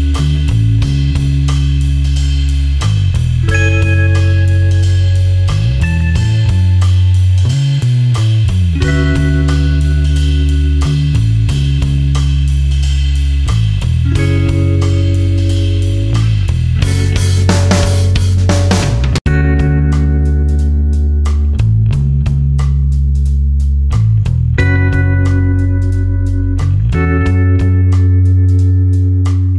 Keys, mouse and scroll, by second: 0.3 ctrl+e, 0.7 space, 0.9 click, 1.4 ctrl+click, 4.7 ctrl+alt+click, 9.3 click, 10.7 super+KP_Add, 11.4 super+KP_Subtract, 13.1 click, 14.3 ctrl+a, 15.1 KP_1, 15.3 KP_0, 15.5 Tab, 17.6 click, 22.3 click.